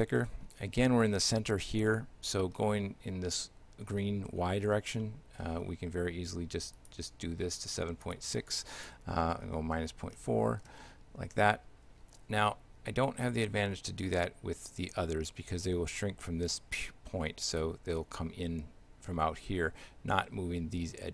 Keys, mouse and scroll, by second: 0.2 shift+middle click, 1.9 shift+middle click, 5.1 shift+middle click, 6.8 click, 12.5 shift+middle click.